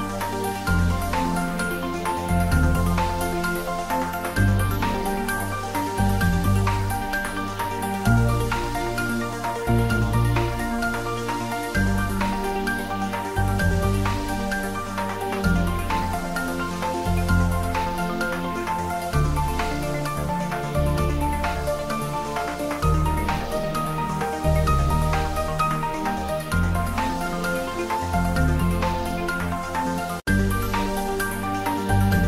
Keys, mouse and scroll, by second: 4.3 click, 5.8-6.5 scroll down 1, 7.0 s, 15.5 click, 18.8-19.4 scroll up 1, 19.4-23.6 middle drag, 24.1-25.7 scroll up 1, 26.0 g, 26.3 z, 29.1 click, 29.6 s, 31.4 click.